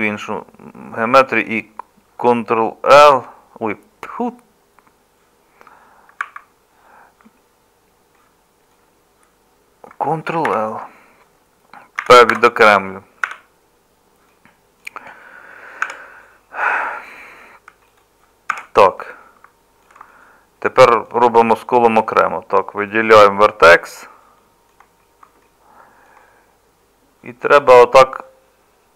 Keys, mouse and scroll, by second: 3.0 ctrl+k, 10.5 ctrl+l, 12.0 p, 13.3 `, 15.8 Tab, 18.5 Tab.